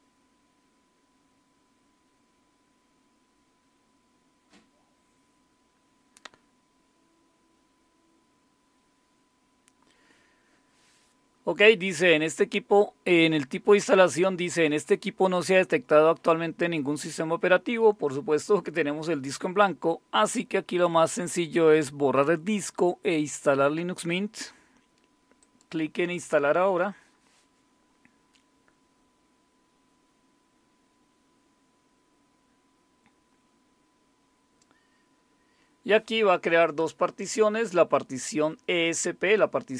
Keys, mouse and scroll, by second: 25.4 click.